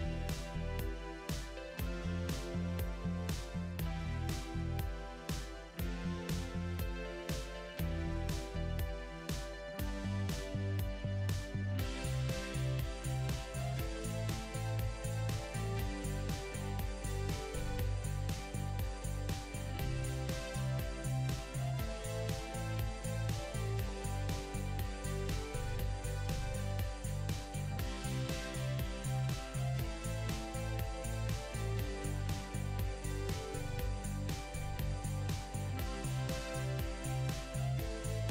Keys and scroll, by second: 30.6 ctrl+z.